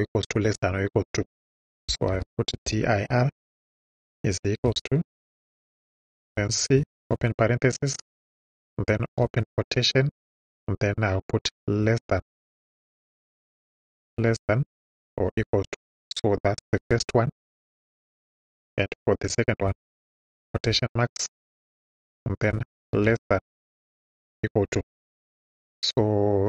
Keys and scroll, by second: 1.7-3.1 typing, 4.6 =, 6.2 c, 6.8 shift+c, 7.0 shift+9, 9.2 shift+', 11.8 ,, 13.2 BackSpace, 14.2 shift+,, 15.9 =, 16.9 Right, 18.3 ,, 20.4 shift+', 22.9 shift+,, 24.1 =.